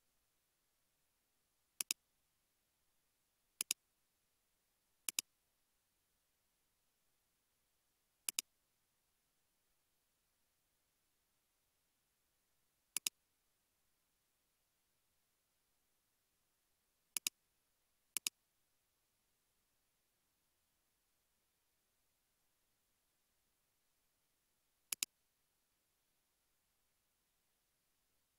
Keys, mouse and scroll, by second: 6.4-7.3 typing, 8.9-9.5 typing, 13.4-14.6 typing, 19.3-20.5 typing, 27.0-27.4 typing.